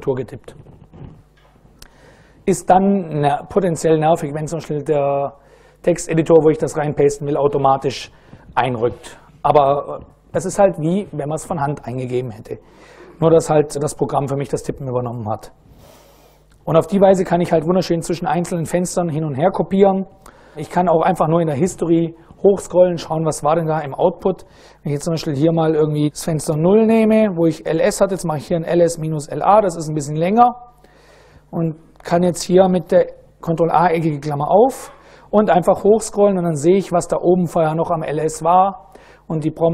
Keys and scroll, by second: 26.1 ctrl+a, 26.4-29.0 typing, 29.0 Return, 31.0 ctrl+a, 31.7 ctrl+[, 34.5 Up, 34.7 Up, 39.1 Down.